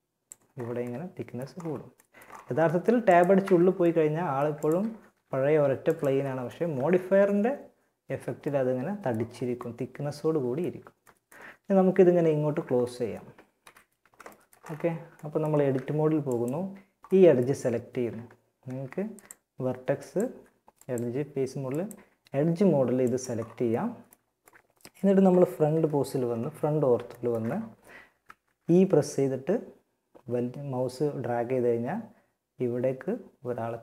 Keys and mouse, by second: 1.0 middle click, 2.6 Tab, 4.2 g, 5.9 Tab, 8.1 middle click, 12.8 KP_1, 14.9 Tab, 22.6 middle click, 22.9 middle click, 24.9 KP_1, 27.4 z, 28.1 e.